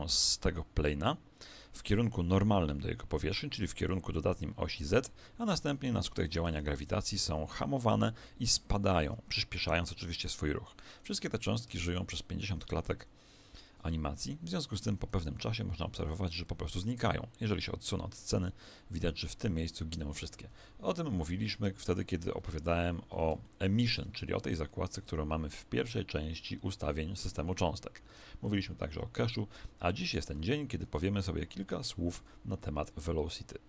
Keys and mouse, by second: 6.4 Escape, 7.2 alt+a, 10.7 Escape, 11.1-13.7 middle drag, 12.5 alt+a, 15.1 Escape, 15.3-17.6 middle drag, 16.0 alt+a, 20.3 Escape, 21.9-25.3 middle drag, 28.5 a, 30.3 a, 30.8 a.